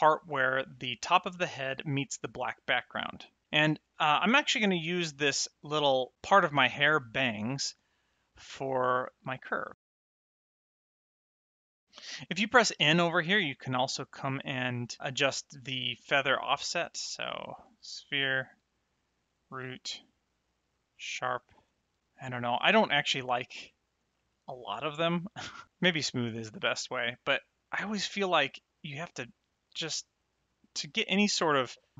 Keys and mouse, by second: 3.4 click, 8.2 click, 9.8 click, 10.4 click, 11.0 click, 11.3 click, 12.8 n, 15.4 click, 17.4 click, 19.2 click, 20.6 click, 22.6 click, 25.4 click, 28.7 click.